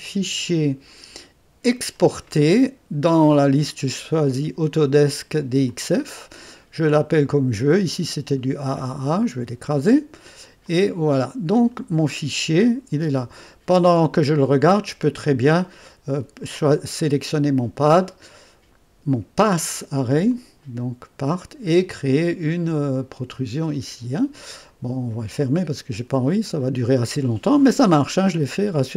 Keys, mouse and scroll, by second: 0.0 click, 1.6 click, 5.8 click, 7.9 click, 9.6 click, 10.7 click, 15.4 click, 16.4 click, 20.3 click, 21.2 click, 22.9 click, 25.4 click, 26.3 click, 28.0 right click.